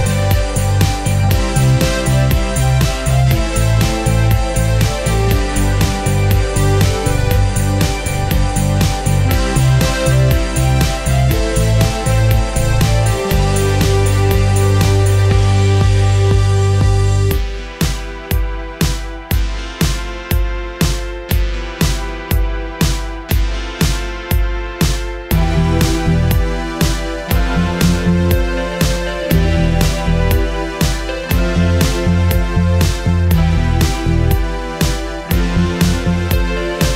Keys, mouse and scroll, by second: 1.2 shift+BackSpace, 2.4 shift+Tab, 3.8-26.2 shift+drag, 28.1 shift+right click, 28.4 shift+click, 30.4-33.3 drag, 35.9 click.